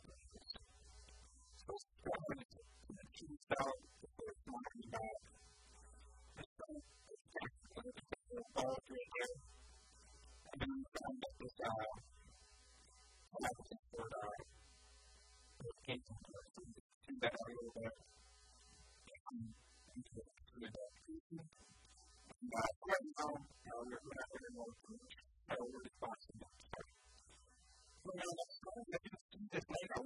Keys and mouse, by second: 0.0-0.5 typing, 0.5 right click, 1.1-3.1 middle drag, 1.5 e, 3.1 click, 3.4 s, 4.3 a, 4.4 b, 5.3 s, 6.1 ctrl+r, 6.1-8.3 right drag, 6.7 a, 6.8 b, 7.7 s, 8.3 click, 9.4 a, 9.6 b, 10.3-12.1 middle drag, 10.7 e, 14.1-16.1 drag, 16.1 e, 16.3-18.2 right drag, 16.5 s, 17.3-19.3 drag, 18.8 e, 19.3 s, 20.4-21.6 drag, 22.2 click, 23.5 KP_1, 23.7 KP_3, 24.4-26.3 drag, 25.7 s, 26.3-27.7 drag, 26.5 e, 28.5 a.